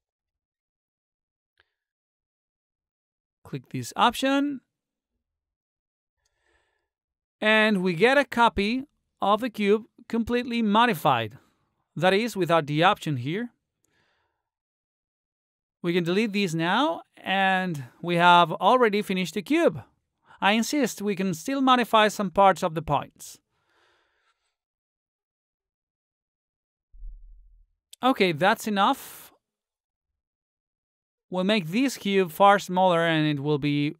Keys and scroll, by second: 16.1 Delete, 20.8 space.